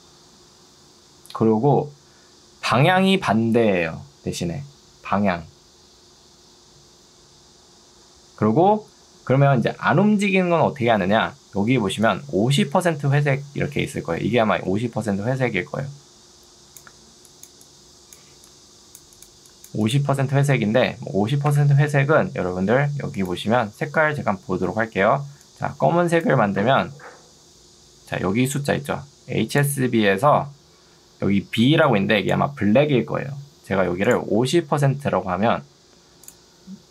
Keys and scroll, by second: 21.6 Escape, 28.2 ctrl+2, 30.8 Escape, 31.8 2, 33.4 Escape, 35.2 0, 36.8 ctrl+2.